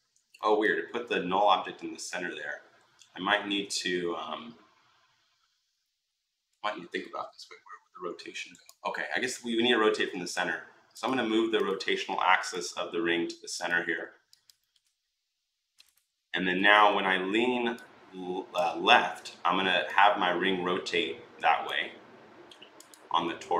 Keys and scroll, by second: 16.3 r.